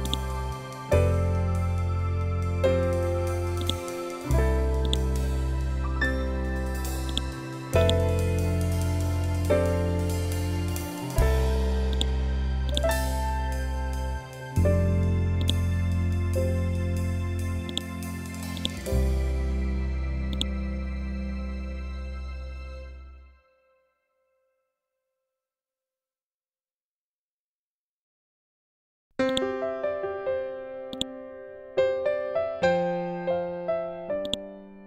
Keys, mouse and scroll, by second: 3.5-11.8 drag, 11.8-15.3 drag, 17.6 click, 21.7 ctrl+g, 29.2 click.